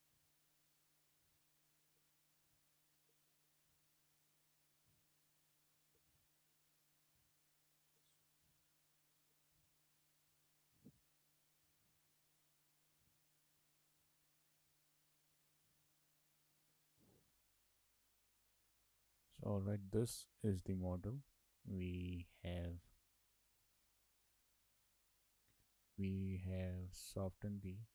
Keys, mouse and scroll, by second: 0.3 Tab, 0.5 middle click, 0.7-1.1 scroll up 2, 1.1 3, 1.3 click, 1.7 shift+click, 1.9 shift+click, 2.0 middle click, 2.7 shift+click, 2.9 shift+click, 3.1 shift+middle click, 3.7 shift+click, 4.0 shift+click, 4.1 middle click, 6.6 shift+middle click, 8.0 scroll down 3, 8.1 middle click, 8.2 Tab, 8.4 shift+middle click, 9.6 click, 9.8 scroll up 3, 9.9 shift+middle click, 10.3 Tab, 11.3 shift+middle click, 11.7 Tab, 11.9 Tab, 12.4 middle click, 12.9 Tab, 13.6 Tab, 13.8 scroll down 1, 13.9 shift+middle click, 14.6 click, 14.9 click, 15.3 scroll down 1, 15.4 shift+middle click, 16.7 middle click, 19.1 shift+middle click, 23.5 scroll down 2, 23.7 shift+middle click, 24.6 click, 25.0 shift+middle click.